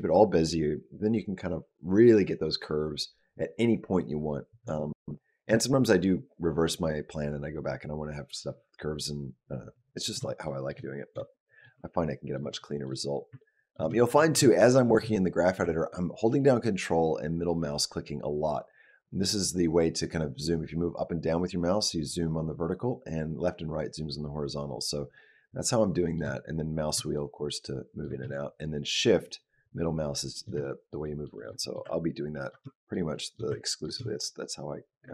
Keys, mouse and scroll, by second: 10.3 shift+middle click, 10.6-11.0 shift+scroll up 1, 11.1 shift+middle click, 12.2 ctrl+middle click, 12.4 shift+middle click, 13.2 ctrl+middle click, 13.8 shift+middle click, 14.3 shift+middle click, 16.5 ctrl+middle click, 26.3 scroll up 1, 26.5 scroll down 1, 27.0 ctrl+middle click, 28.1 shift+middle click, 30.4 shift+middle click, 30.9 shift+middle click, 31.2 shift+middle click, 31.4 shift+middle click, 32.3 ctrl+middle click, 32.5 shift+middle click, 33.0 shift+middle click, 33.7 ctrl+middle click, 33.9 shift+middle click.